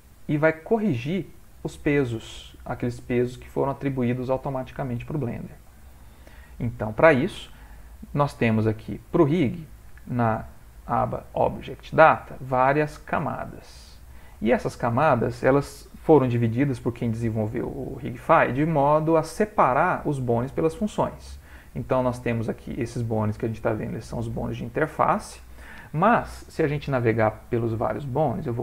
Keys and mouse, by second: 0.8 middle click, 4.1 middle click, 5.6 ctrl+middle click, 5.8 ctrl+middle click, 6.4 middle click, 21.7 click.